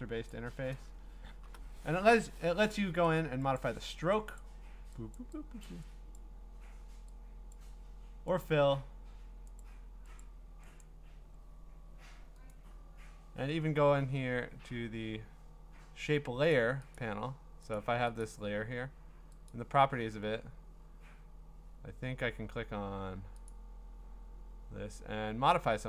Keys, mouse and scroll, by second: 0.3 click, 1.1-1.6 scroll, 3.1 click, 3.6 click, 4.4 click, 5.2 click, 5.7 click, 6.2 click, 7.5 click, 8.4 click, 9.6 click, 10.2 click, 10.8 click, 12.5 click, 13.7-16.5 scroll, 16.5 click, 17.0 click, 17.8 click, 18.2 click, 19.5 click, 20.2-23.5 scroll, 23.5 click, 24.6-25.4 scroll, 25.4-25.8 scroll.